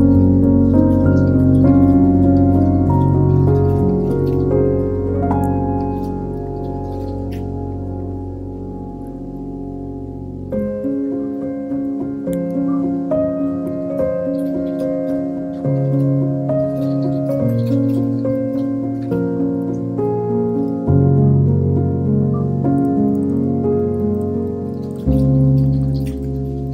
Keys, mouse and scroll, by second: 0.9-1.3 scroll up 2, 2.5 Tab, 3.7 alt+z, 4.4 2, 4.8 click, 5.5 x, 7.3 1, 7.7 middle click, 9.3 Tab, 10.4 ctrl+a, 11.6 Tab, 12.5 ctrl+shift+b, 18.4 Tab, 18.9-20.9 right drag, 21.5 click, 23.6-25.6 drag, 25.8-26.7 drag.